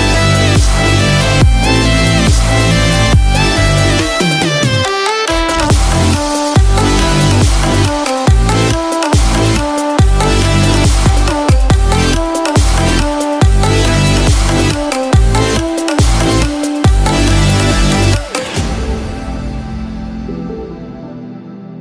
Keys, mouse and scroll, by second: 20.4 n.